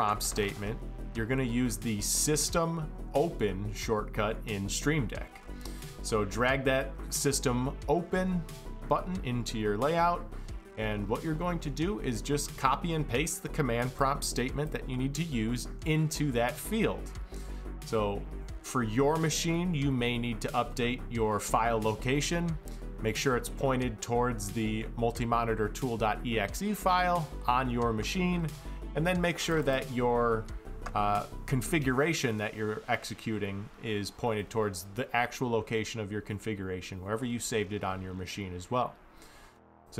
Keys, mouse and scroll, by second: 9.0-11.2 drag, 13.6 click, 14.3 click, 29.2 click, 29.4 click, 33.9 click, 36.7 click, 38.8 click, 39.6 click.